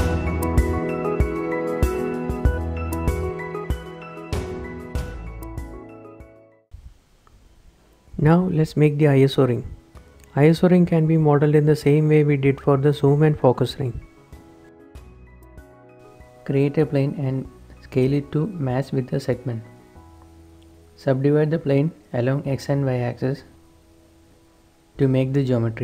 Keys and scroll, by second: 0.2 Tab, 0.8 Tab, 1.4 Tab, 1.8 shift+KP_7, 1.8 z, 7.2 shift+7, 10.5 h, 13.3 a, 15.8 Tab, 16.1 s, 16.7 g, 18.6-20.5 typing, 20.7 ctrl+r, 20.7 Escape, 21.3 Escape, 21.9 ctrl+r, 24.6 Escape.